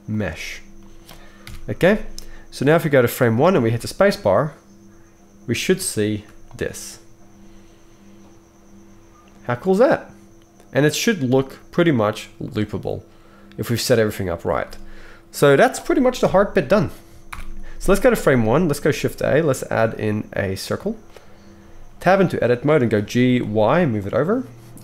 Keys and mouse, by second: 1.4 KP_1, 3.6 space, 14.6 space, 16.2 KP_1, 17.3 shift+Left, 18.8 shift+a, 22.0 Tab, 22.9 g, 24.1-24.8 right drag.